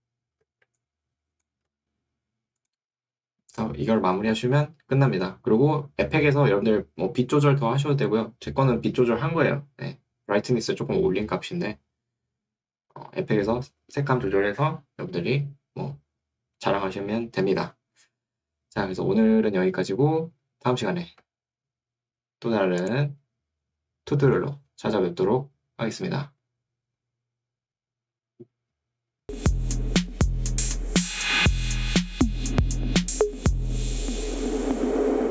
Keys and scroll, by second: 0.5 2, 1.7 Escape.